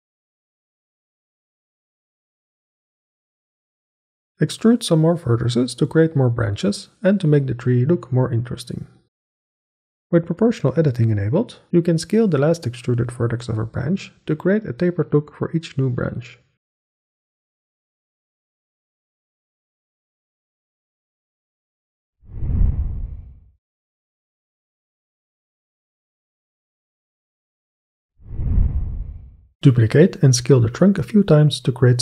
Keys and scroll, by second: 0.9 g, 2.9 g, 4.3 s, 5.3 Escape, 5.4 ctrl+a, 7.0 ctrl+a, 8.4 g, 9.3 e, 9.9 ctrl+a, 11.3 ctrl+a, 12.7 ctrl+a, 13.7 ctrl+a, 15.0 ctrl+a, 15.6 ctrl+a, 16.4 ctrl+a, 17.7 ctrl+a, 19.3 Tab, 29.6-32.0 typing.